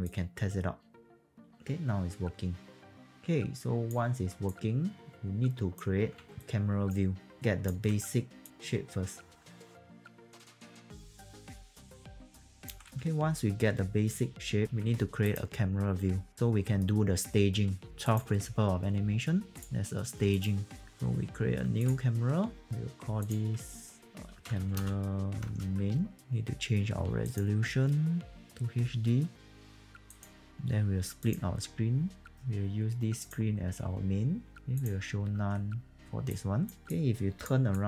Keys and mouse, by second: 0.0 click, 4.4 alt+click, 6.2 q, 6.4 alt+right click, 7.4 alt+click, 8.4 click, 9.2-12.8 typing, 9.4 click, 9.9 click, 10.4 click, 10.5 click, 10.8 click, 11.1 click, 11.2 click, 11.4 click, 11.9 alt+click, 12.0 click, 15.2 click, 16.3 alt+middle click, 18.0 click, 21.8 click, 23.2 click, 24.3 c, 24.7 space, 25.4 BackSpace, 26.2 click, 27.2 click, 30.2 click, 31.2 click, 35.3 alt+2, 36.3 alt+click, 36.9 alt+click, 37.7 alt+click.